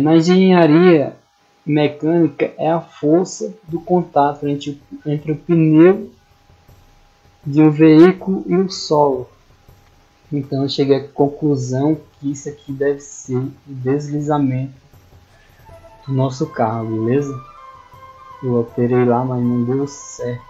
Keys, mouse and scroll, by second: 14.4 middle click, 17.1-17.7 scroll down 1, 20.0-20.4 scroll down 1.